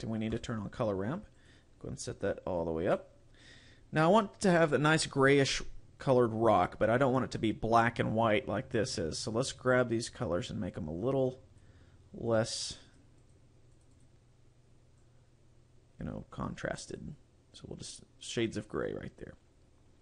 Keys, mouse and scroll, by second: 0.5 click, 1.5 click, 9.6 click, 12.9 click, 13.3 click, 13.8 click, 14.0 click.